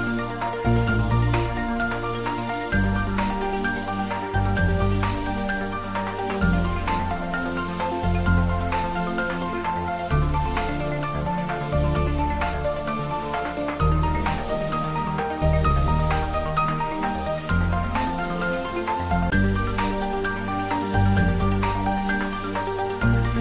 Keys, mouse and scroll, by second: 2.2-2.6 scroll up 1, 2.6-2.9 scroll down 1, 2.9-3.5 middle click, 3.5-4.3 scroll up 1, 4.3 click, 4.4-5.4 right drag, 5.8 click, 7.1-7.5 right click, 7.8-9.5 drag, 14.5-15.0 scroll up 1, 15.4 middle click, 16.4-17.8 click, 16.8 right click, 18.1 click, 20.8 1, 21.6 Return, 23.1-23.4 scroll down 1.